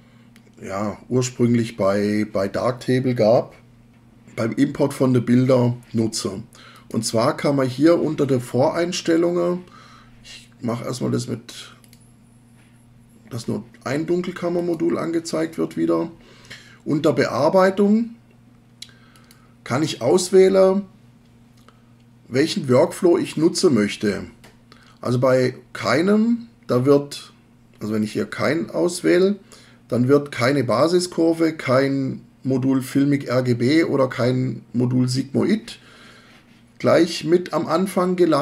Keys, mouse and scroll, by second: 6.7 click, 14.6 click.